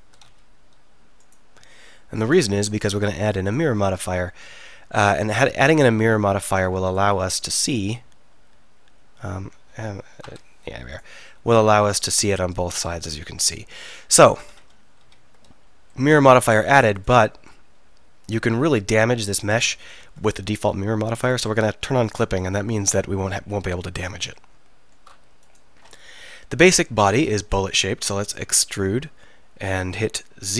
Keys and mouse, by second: 0.3 x, 2.3-2.8 drag, 4.1-6.6 middle drag, 7.3 right click, 7.6 e, 8.1 right click, 12.9-14.6 drag, 14.6 ctrl+z, 15.1 ctrl+z, 18.3 click, 19.4 middle click, 20.1 ctrl+z, 24.3 click, 25.5 click, 26.3 KP_3, 27.1 click, 28.8 e.